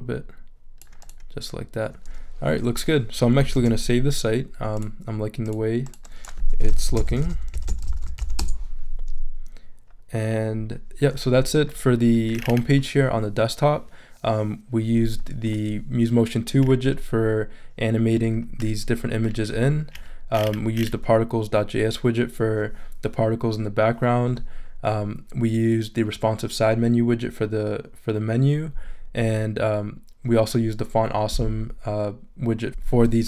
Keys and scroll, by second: 3.5 super+s, 6.4-8.7 typing.